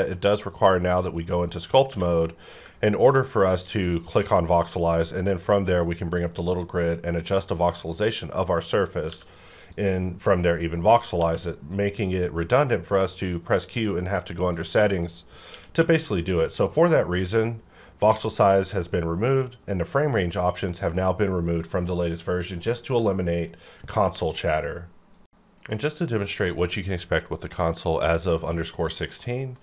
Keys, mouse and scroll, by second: 1.8 q, 4.1 ctrl+click, 8.6 click, 9.0 q, 9.5 click, 11.2 q, 14.5 click, 14.5 click, 15.5 q.